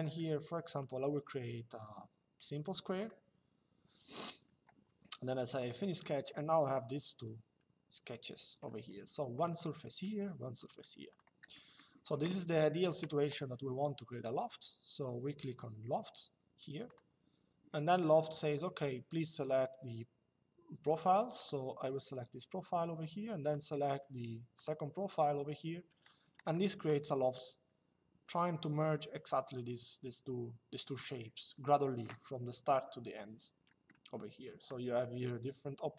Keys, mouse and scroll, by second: 0.5 click, 2.7 click, 4.2 Escape, 5.2 click, 6.4 shift+middle click, 9.1 click, 10.3 click, 11.2 middle click, 12.7 click, 16.6 click, 23.1 click, 24.2 click, 26.2 shift+middle click, 33.6 shift+middle click.